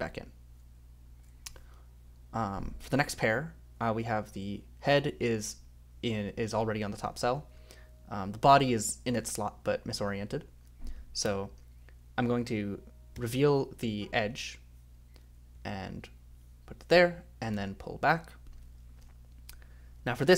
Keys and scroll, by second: 3.1 ;, 6.5 ;, 7.1 a, 11.2 j, 15.5 j, 17.5 k, 20.0 j, 20.1 j.